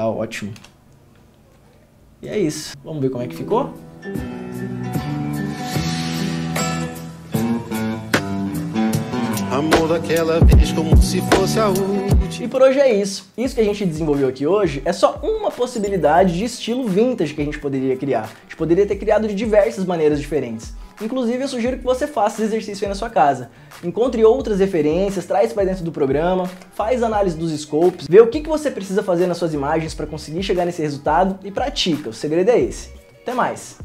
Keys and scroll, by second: 0.8 ctrl+f, 2.6 ctrl+d.